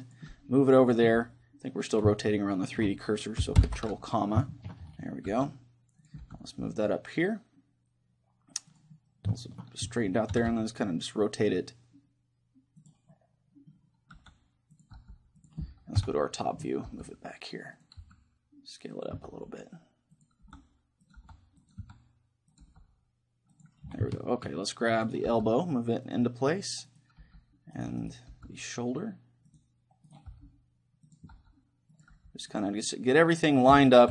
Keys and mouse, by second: 0.2 click, 0.3 r, 2.2 right click, 2.6-4.2 middle drag, 3.6 ctrl+,, 4.5-6.1 middle drag, 5.4 r, 6.1-8.0 drag, 6.2 g, 8.8-10.6 drag, 9.4-11.2 middle drag, 10.4 r, 12.9-14.8 drag, 13.2-15.0 middle drag, 14.2 r, 15.0-17.6 drag, 15.0 g, 16.0 KP_7, 16.9 g, 17.8-25.3 drag, 18.0 s, 19.3 g, 20.5 r, 21.2 g, 21.8 s, 22.6 g, 24.2 middle click, 25.0 middle click, 25.0 right click, 25.3 g, 25.8 right click, 27.2 g, 28.3-29.6 right drag, 28.3 g, 30.3 g, 31.4-34.1 drag, 31.4 right click, 31.4 r, 32.2 g, 32.8-34.1 middle drag.